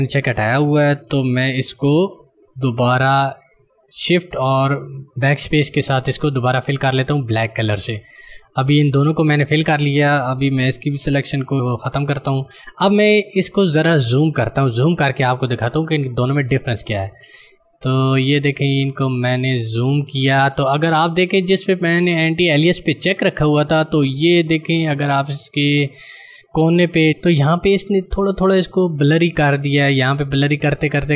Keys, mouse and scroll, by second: 5.0 BackSpace, 7.3 click, 11.9 ctrl+d, 14.5 click, 24.6 click.